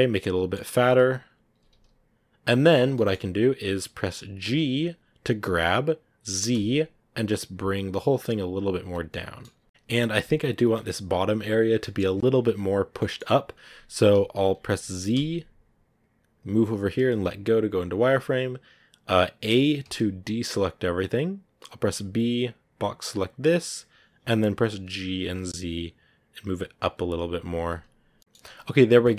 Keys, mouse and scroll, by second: 1.5 s, 2.8 middle click, 3.1-4.3 scroll up 1, 4.3 g, 8.7 Tab, 8.9 scroll down 2, 9.0 middle click, 9.4 a, 9.5 scroll down 2, 11.7-13.2 middle drag, 13.2-14.3 scroll up 1, 17.2 z, 18.0-18.3 scroll up 2, 19.7 a, 23.4 b, 24.8 g, 27.0 Tab, 27.4-28.1 scroll down 4, 27.7 z, 28.1-29.1 middle drag.